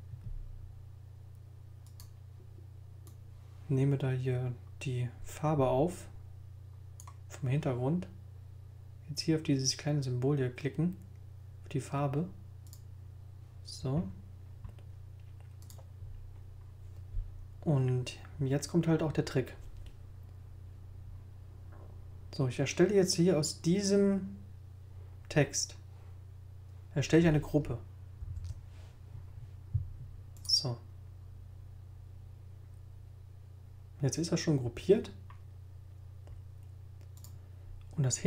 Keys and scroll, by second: 28.2 super+g.